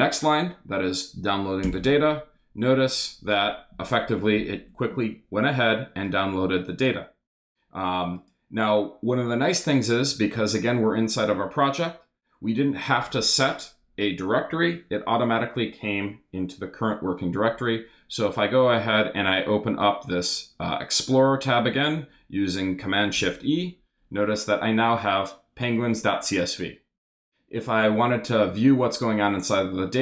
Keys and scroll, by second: 1.6 super+Return, 23.1 shift+super+e.